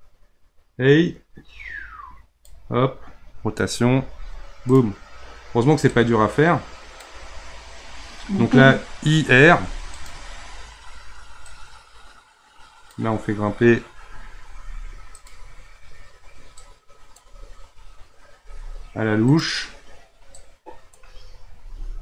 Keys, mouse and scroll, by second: 3.9 r, 5.9-9.0 drag, 11.5-14.5 drag, 14.5 r, 16.6-18.3 drag, 18.3 r, 20.4-21.6 drag, 21.6 r.